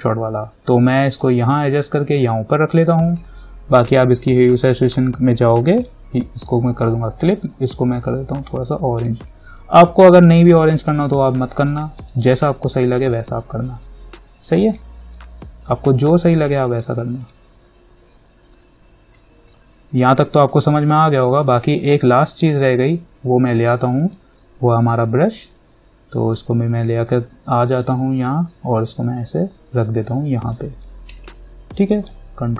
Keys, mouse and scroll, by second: 0.2-19.7 alt+drag, 0.3-2.6 typing, 8.4-9.1 typing, 24.8-28.4 drag, 28.4-31.3 alt+drag.